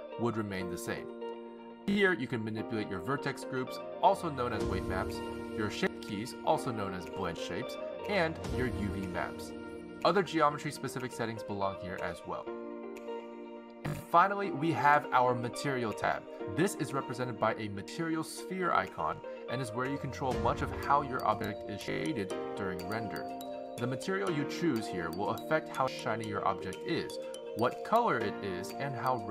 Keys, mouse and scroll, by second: 1.3 click, 1.7 x, 2.9 click, 4.9 click, 5.7 click, 7.1 click, 8.2 click, 9.5 click, 10.2 click, 15.9 click, 20.9-21.8 scroll down 12, 21.8-23.4 scroll up 14, 23.4 click, 24.4-25.1 scroll down 3, 25.6 click, 28.3-29.3 scroll down 12.